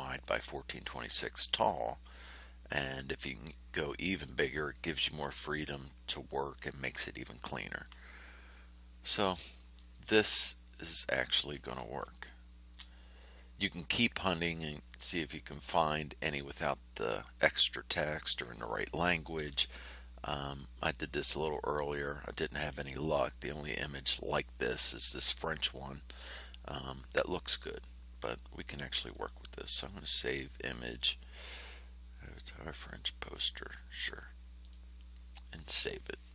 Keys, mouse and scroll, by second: 10.9-11.2 scroll down 2, 11.4 scroll up 2, 29.1-29.4 scroll up 1, 29.9 scroll up 1, 30.2 click, 34.6 click.